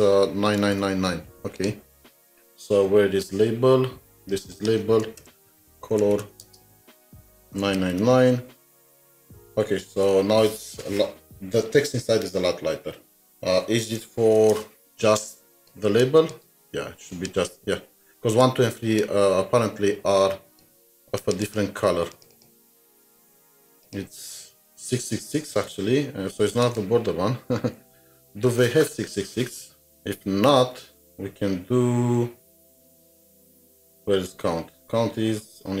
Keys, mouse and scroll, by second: 0.4 click, 0.6 ctrl+c, 0.6 typing, 2.9-3.3 scroll down 2, 5.2 scroll down 1, 5.2 Return, 5.5-6.8 typing, 7.8 typing, 14.4-16.4 typing, 15.2 double click, 18.4-20.8 space, 21.4 double click, 22.1 double click, 25.2 click, 25.5 ctrl+c, 25.6 typing, 28.5 alt+Tab, 32.1 alt+Tab, 33.6-34.1 scroll down 1, 34.1-34.7 scroll up 2, 35.0-35.8 scroll up 1.